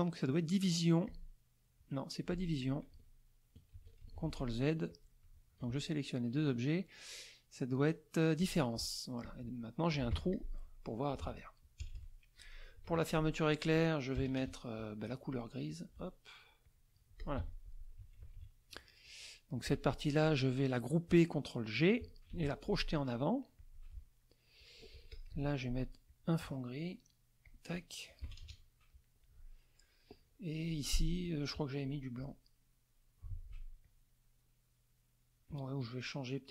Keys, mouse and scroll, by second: 1.0 click, 2.6 click, 3.7 ctrl+s, 4.0 ctrl+z, 4.9 click, 5.3 shift+click, 6.4 click, 8.4 click, 9.2 click, 10.1 F1, 10.3 click, 11.2 ctrl+z, 12.4 KP_Subtract, 12.4 middle click, 12.9 F2, 13.5 click, 14.1 KP_Add, 15.7 click, 16.6 click, 17.2 click, 17.4 F1, 18.8 KP_Subtract, 18.8 click, 18.9 middle click, 19.7 click, 22.3 ctrl+g, 23.5 click, 24.2 middle click, 24.7 middle click, 25.1 click, 25.3 F2, 26.1 click, 27.4 click, 28.2 KP_Subtract, 28.4 KP_Add, 29.0-30.1 middle drag, 31.0 F2, 31.2 click, 32.1 click, 33.8 click.